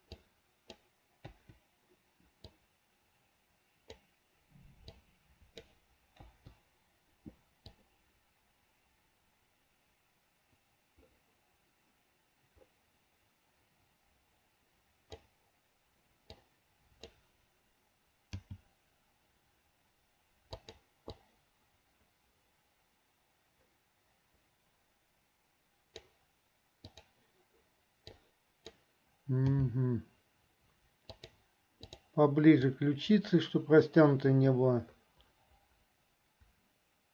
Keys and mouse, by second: 0.4 click, 1.5 Delete, 2.7-4.1 drag, 5.0 click, 6.4 Delete, 7.9-15.4 drag, 16.4 click, 21.4-26.3 drag, 27.0 click, 28.2 click, 32.2 click, 33.0-37.1 drag.